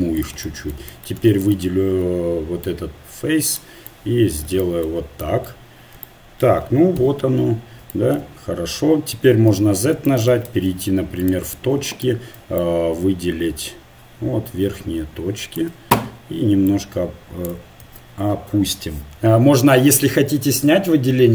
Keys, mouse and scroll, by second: 2.2-3.6 right drag, 2.7-4.6 drag, 3.9 right click, 5.3 right click, 5.3 middle click, 7.0 KP_1, 9.5 z, 10.5 ctrl+Tab, 12.0 a, 12.6-15.2 drag, 16.7-17.8 drag, 17.8 ctrl+z.